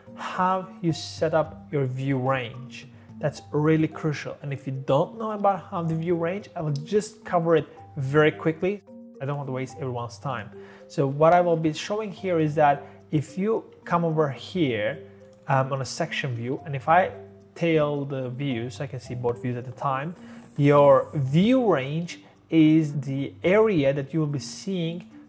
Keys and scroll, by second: 5.3 Delete, 11.5 Escape, 11.7 Escape, 16.3-16.9 typing.